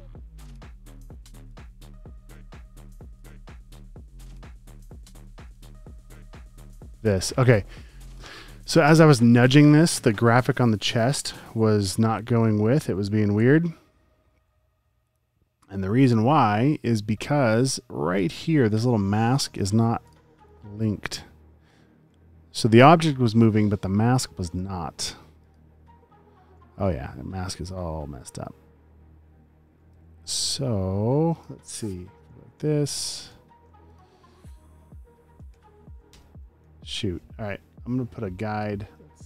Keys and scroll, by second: 0.9 v, 11.3 shift+Right, 12.3 shift+Left, 14.9 shift+Right, 16.2 shift+Left, 29.9 super+d, 32.5 space, 34.6 shift+Left, 35.5 super+d, 36.1 Return, 36.7 v.